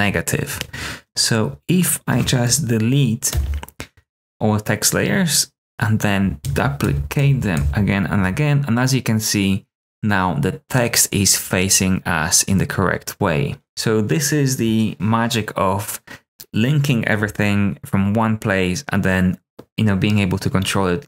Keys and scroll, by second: 3.3 BackSpace, 6.4 super+d, 6.8 super+d, 7.1 super+d, 7.5 super+d.